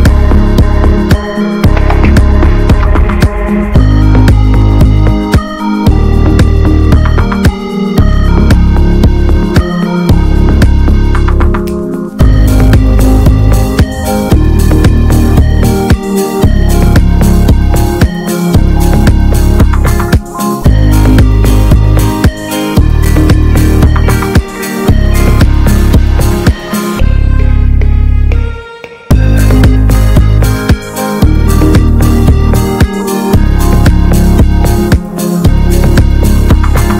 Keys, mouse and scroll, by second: 3.7 click, 4.0 middle click, 4.2-4.5 scroll up 1, 4.5-7.6 shift+middle drag, 7.6-9.3 drag, 12.7-20.4 drag, 20.4 alt+middle click, 24.0 b, 24.7 alt+middle click, 25.2 middle click, 25.3-25.8 scroll up 1, 25.8 alt+z, 26.2 alt+middle click, 29.5-32.4 right drag, 33.5-36.3 drag.